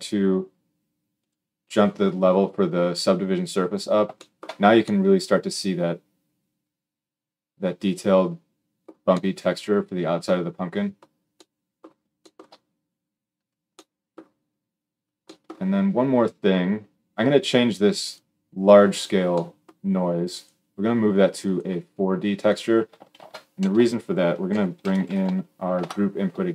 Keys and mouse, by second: 22.3-26.5 middle drag, 22.9 shift+a.